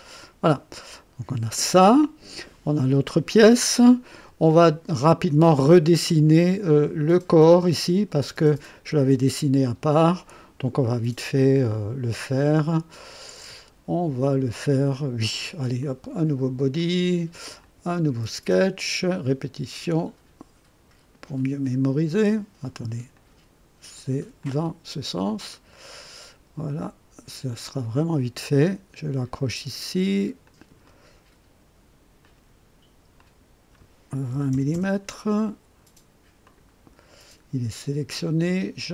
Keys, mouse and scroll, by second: 0.1 click, 0.8 click, 11.3 click, 15.7 click, 16.7 click, 17.5 click, 23.1 click, 23.9 click, 24.3 click, 25.4 click, 27.5 click, 29.7 click, 30.4 click, 30.8 middle click, 32.2 click, 33.1 click, 34.0-35.0 typing, 36.4 click, 38.8 click.